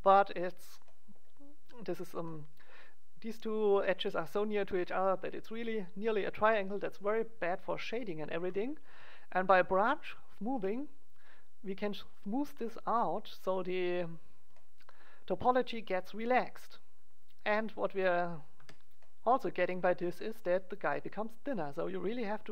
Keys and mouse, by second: 0.1 middle click, 0.8-10.2 middle drag, 10.2-12.0 drag, 17.6-19.5 drag, 18.5 z, 21.2-22.5 drag.